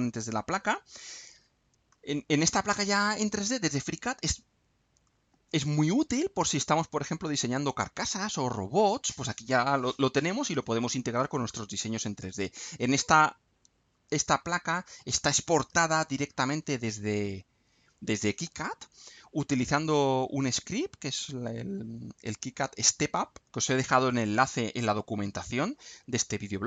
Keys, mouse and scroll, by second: 0.2 click, 0.6-1.3 scroll down 2, 1.9-5.2 middle drag, 11.4-15.0 middle drag.